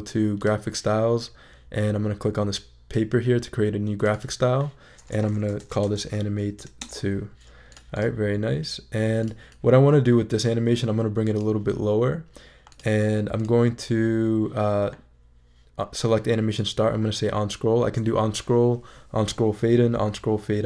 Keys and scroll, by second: 5.3-6.6 typing, 6.8 Return.